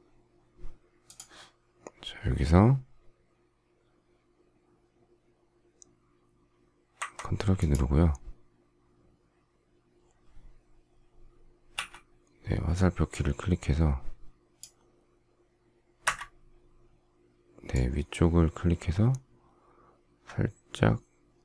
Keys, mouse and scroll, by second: 16.0 Up.